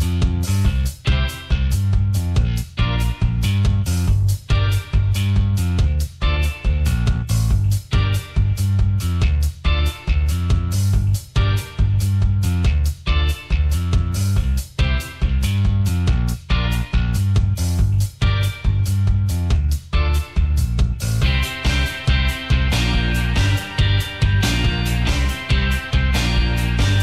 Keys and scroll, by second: 0.0-0.3 typing, 13.1 Return, 13.7-15.3 typing, 23.8 Return, 25.8 Return, 26.8 Return.